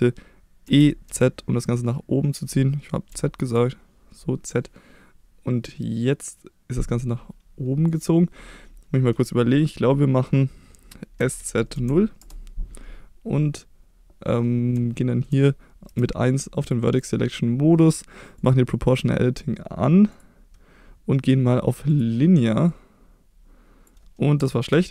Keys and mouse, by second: 0.7 e, 1.1 z, 3.1 z, 7.9 click, 11.2 s, 11.4 z, 11.8 0, 12.2 Return, 15.0 shift+middle click, 15.9 1, 18.4 click, 20.1-22.2 drag, 22.7-23.9 drag, 24.7 ctrl+z.